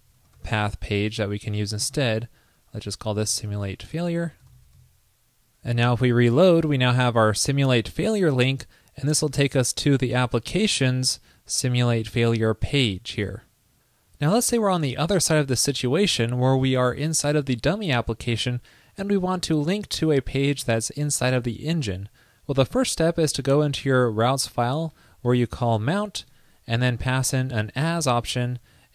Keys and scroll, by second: 4.8 super+s, 6.0 super+r, 28.3 ctrl+l.